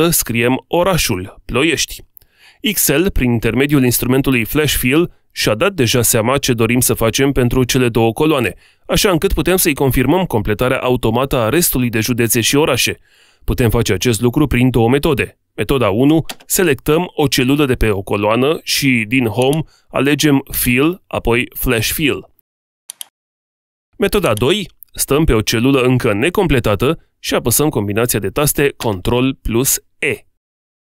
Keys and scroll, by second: 28.1 ctrl+e.